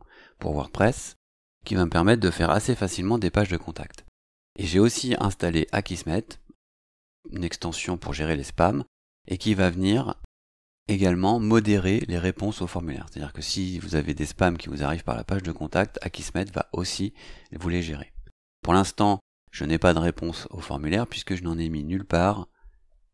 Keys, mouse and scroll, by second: 19.3 click.